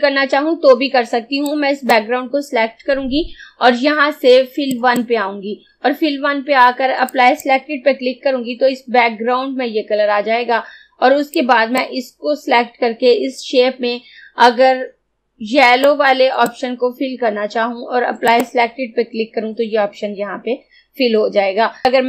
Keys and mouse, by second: 1.6-4.7 drag, 4.7 click, 7.1 click, 11.4-16.0 drag, 16.0-18.3 drag.